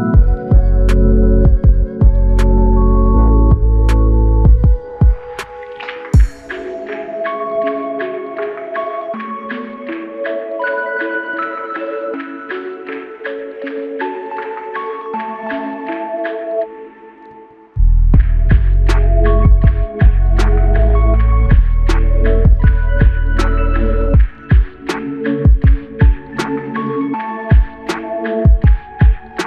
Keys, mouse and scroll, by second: 0.1 shift+click, 1.9 alt+click, 3.6 alt+click, 4.7 shift+click, 6.2 alt+click, 9.8 typing.